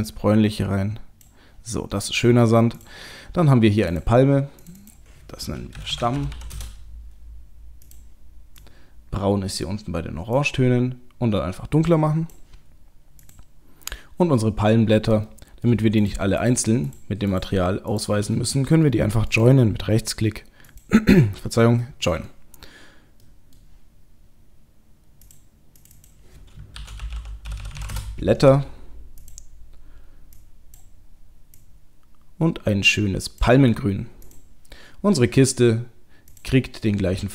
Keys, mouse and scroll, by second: 1.7-2.8 scroll up 2, 2.8 click, 3.9 click, 4.8 click, 6.3 m, 9.3 click, 13.2 click, 15.3 middle click, 16.0-18.2 shift+click, 18.5 middle click, 19.3 right click, 21.8 middle click, 23.3 middle click, 25.1 click, 25.8 click, 27.6 t, 29.2 click, 34.3 click, 36.3 click.